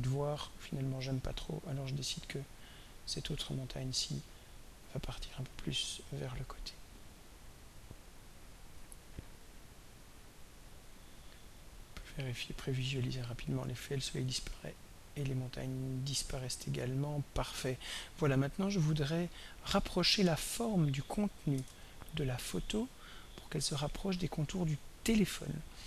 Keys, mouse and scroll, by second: 1.1 click, 1.7 click, 3.1 click, 5.3-6.6 drag, 8.8 right click, 10.2 drag, 11.0-19.2 drag, 21.6 ctrl+s, 22.9 click.